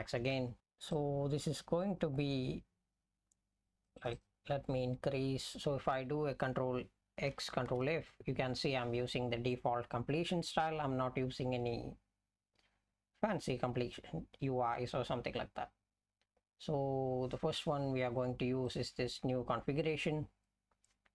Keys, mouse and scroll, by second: 7.8 ctrl+f, 18.7 click, 18.9 click.